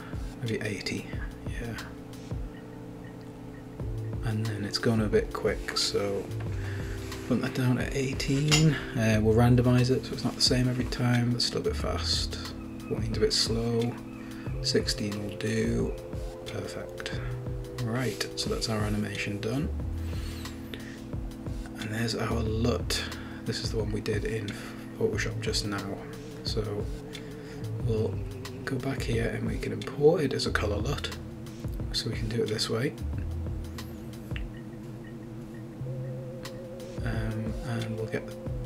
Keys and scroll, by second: 0.4 typing, 0.6 Return, 2.1-3.0 typing, 7.7-8.6 typing, 13.2-14.1 typing, 16.3-17.2 typing.